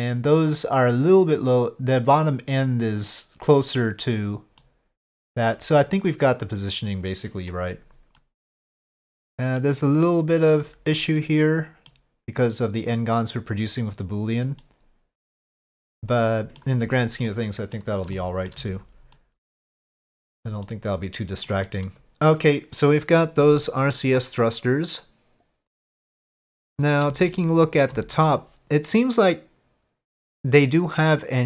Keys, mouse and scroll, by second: 4.6-5.3 middle drag, 5.8-7.5 middle drag, 8.2-9.6 middle drag, 11.2-11.9 middle drag, 14.6-15.5 middle drag, 16.2-16.6 middle drag, 17.3-17.7 middle drag, 18.1-18.5 shift+middle drag, 19.1-19.9 middle drag, 20.7-21.5 middle drag, 21.8-22.2 middle drag, 27.3-27.8 shift+middle drag.